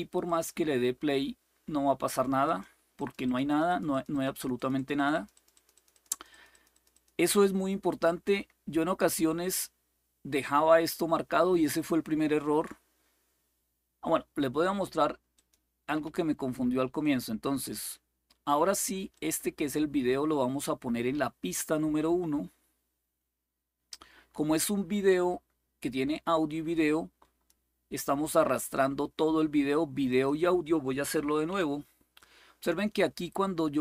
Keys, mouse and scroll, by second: 0.0 click, 2.2 click, 2.7-6.8 drag, 10.4 click, 15.1 click, 16.7-29.7 drag, 29.8-31.2 drag, 31.2 Delete.